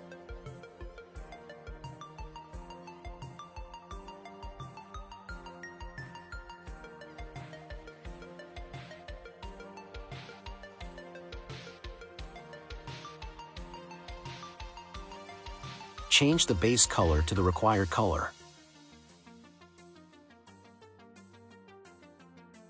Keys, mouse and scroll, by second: 0.1-3.2 drag, 6.8-7.8 scroll up 6, 7.8-9.7 scroll down 5, 9.7-10.7 middle drag, 10.7-11.3 scroll down 1, 11.3-11.8 scroll down 4, 11.8-15.1 middle drag, 15.1-15.7 scroll up 1, 15.7-16.3 scroll down 1, 16.3 middle click, 16.7-17.8 scroll down 1, 17.8 click.